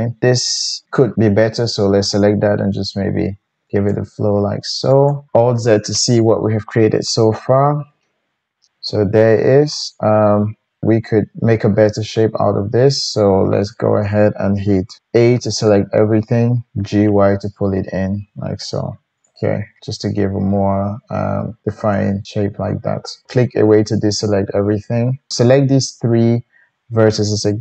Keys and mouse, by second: 0.2-1.2 middle drag, 0.2-1.2 right drag, 1.3 g, 3.9-4.9 drag, 5.1 click, 5.3-17.7 alt+middle drag, 5.6 alt+z, 15.3 a, 16.8 g, 22.3-25.3 middle drag, 25.3-27.6 drag.